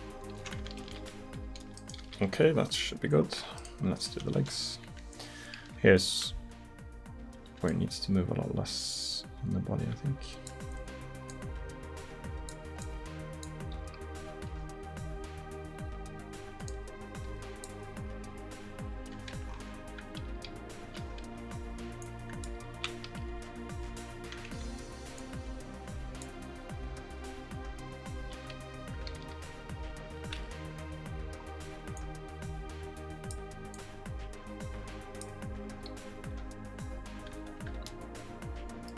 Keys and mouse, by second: 0.9 alt+r, 1.5 alt+t, 2.1 alt+r, 4.4 KP_1, 4.9 KP_3, 5.7 r, 13.8 r, 18.3 r, 20.4 r, 23.2 r, 25.2-29.2 drag, 26.6 r, 29.2 r, 32.0-36.3 drag, 36.3 r.